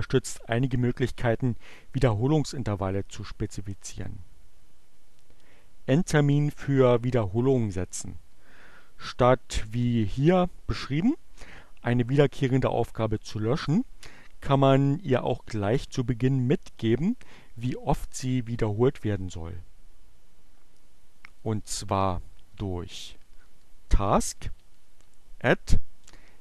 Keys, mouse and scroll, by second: 21.2 click, 21.5-24.8 typing, 26.1-26.4 typing.